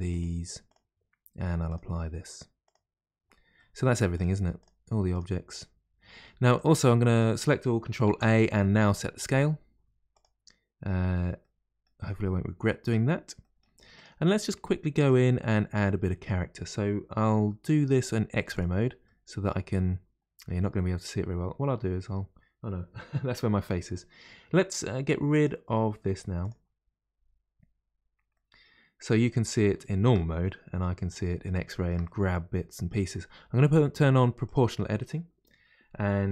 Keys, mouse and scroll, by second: 0.1 click, 1.6 click, 2.6 click, 3.5-4.1 middle drag, 4.1 click, 4.6 click, 5.1 click, 5.5 click, 6.1-6.5 middle drag, 6.5 click, 8.0 ctrl+a, 11.4-12.0 middle drag, 12.0-12.5 scroll up 1, 12.6-13.0 shift+middle drag, 13.0-13.4 scroll up 1, 13.4-13.9 middle drag, 13.9 click, 14.6-15.0 scroll down 1, 15.0 Tab, 18.5 click, 19.0-21.5 middle drag, 21.5-22.0 scroll up 1, 25.3-27.1 drag, 27.1-27.9 scroll up 2, 28.3-34.4 middle drag, 28.3 scroll up 7, 34.4 click.